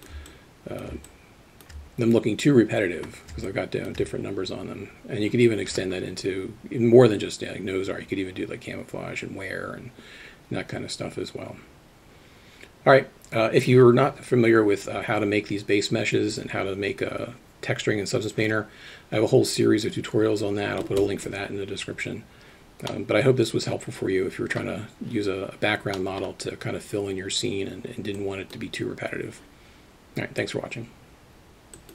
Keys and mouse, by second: 0.5 alt+click, 1.3-2.3 alt+shift+drag, 22.9-24.6 middle drag, 26.1 middle click.